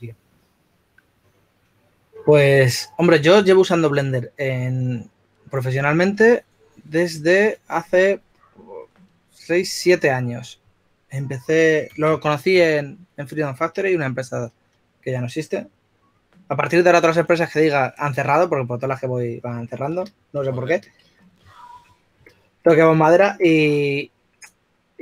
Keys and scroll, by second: 0.0-0.2 typing, 21.8 shift+f.